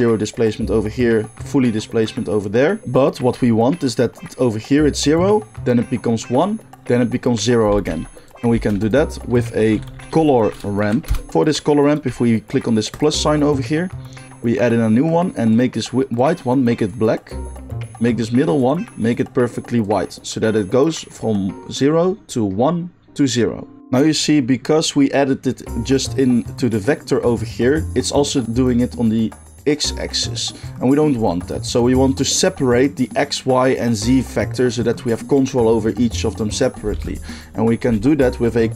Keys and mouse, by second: 8.5 shift+a, 12.9-16.3 drag, 18.6 click, 30.6 click, 31.1 g, 31.6 click, 36.9 shift+a, 37.7-38.7 middle drag.